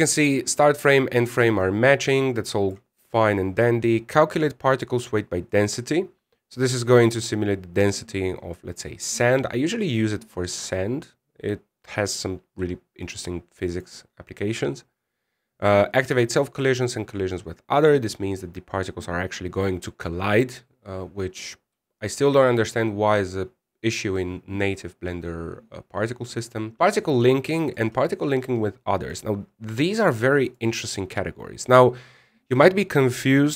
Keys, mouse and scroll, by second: 1.9 scroll down 5, 3.3 click, 3.8-5.0 scroll down 2, 5.6 click, 6.2 click, 7.8-8.5 scroll down 8, 11.3 click, 11.7-13.8 scroll down 6, 13.8 click, 14.4 click, 14.8-17.4 scroll down 4, 18.5 click, 19.0-21.6 scroll down 3.